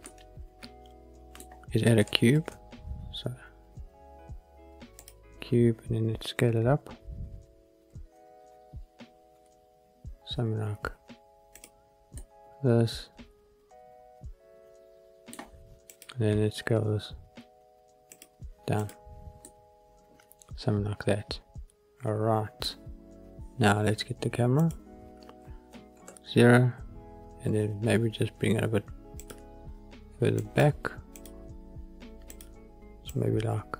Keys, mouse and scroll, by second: 0.0-1.3 middle drag, 1.3-2.0 scroll up 1, 2.3 shift+a, 6.4 s, 11.5 click, 12.1-13.3 middle drag, 13.3-14.0 drag, 14.0-15.3 middle drag, 15.8 click, 16.5 s, 18.0-18.8 drag, 19.3-20.2 middle drag, 20.2 drag, 20.4-20.8 middle drag, 20.8 click, 21.0-22.5 middle drag, 24.5 click, 25.9 ctrl+alt+KP_0, 29.1 click, 30.3-32.2 drag, 33.0-33.7 drag.